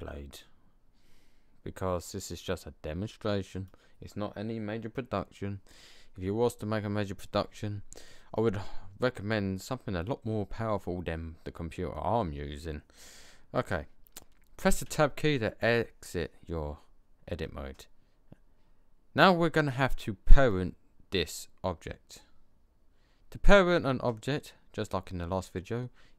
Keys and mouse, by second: 1.4 middle click, 10.7 click, 11.1-12.6 middle drag, 14.8 Tab, 17.4-17.7 middle drag, 18.0 middle click, 18.4-19.3 middle drag.